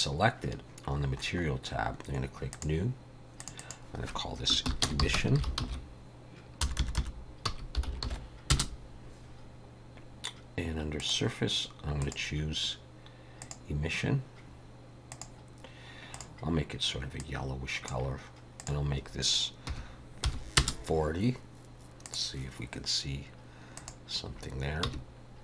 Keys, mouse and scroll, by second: 1.0-2.5 scroll up 10, 2.5 click, 2.5-3.4 scroll up 1, 3.4 click, 3.6 click, 6.8 BackSpace, 11.0 click, 12.0 click, 13.4 click, 16.1 click, 18.6 click, 22.1 click, 23.8 click, 24.9 h.